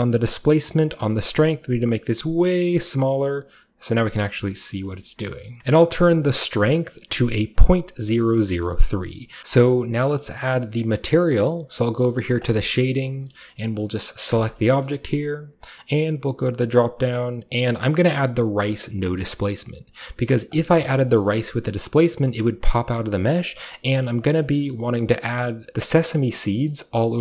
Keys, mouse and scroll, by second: 1.5-4.6 shift+drag, 4.2-5.6 shift+scroll up 2, 4.6 shift+middle click, 5.6 Return, 6.5-8.2 scroll up 1, 6.5-8.2 middle drag, 8.7-9.2 middle drag, 8.7 scroll up 1, 9.4 middle click, 9.7 middle drag, 10.3-12.4 middle drag, 10.3-12.4 scroll up 1, 12.4-14.6 drag, 14.6 shift+right click, 14.6 shift+scroll down 2, 14.7-16.3 shift+middle drag, 16.4-21.2 drag, 21.2 shift+middle drag, 21.4-22.7 shift+scroll up 2, 21.6 shift+middle click, 22.8 middle click, 22.8-23.4 scroll up 1, 23.4 scroll down 1.